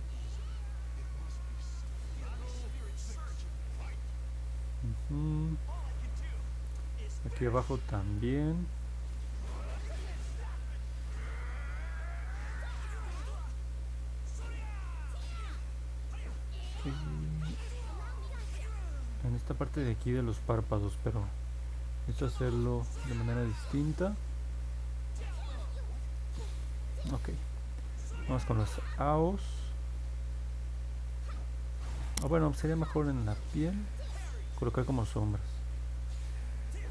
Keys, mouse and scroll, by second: 0.8 ctrl+z, 1.4-3.2 drag, 9.0-14.2 drag, 33.9 click.